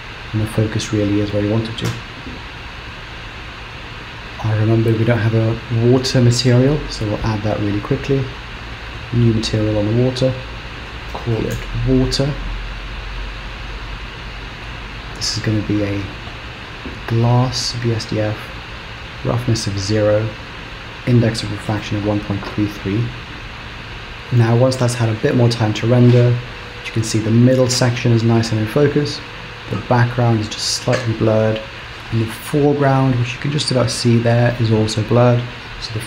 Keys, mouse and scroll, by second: 1.9 z, 4.2 click, 6.8 click, 8.7 click, 10.2 click, 14.7 click, 19.1 click, 20.4 click, 22.1 KP_3, 23.6-24.1 scroll up 3.